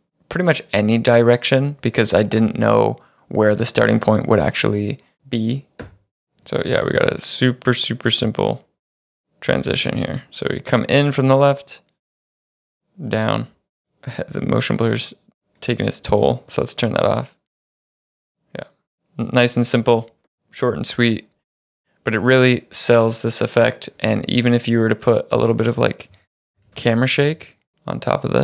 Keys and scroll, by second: 2.2 space, 5.9 space, 6.5 space, 9.7 space, 13.8 space, 15.7 space, 26.2-27.7 typing.